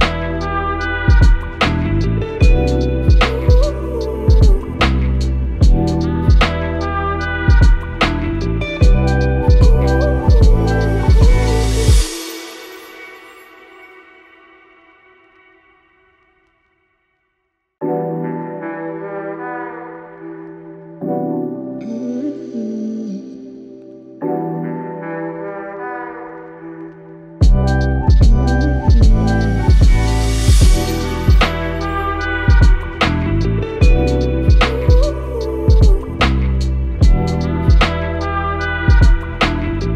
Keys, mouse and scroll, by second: 0.8 click, 6.8 click, 25.6-26.5 click, 39.7 i.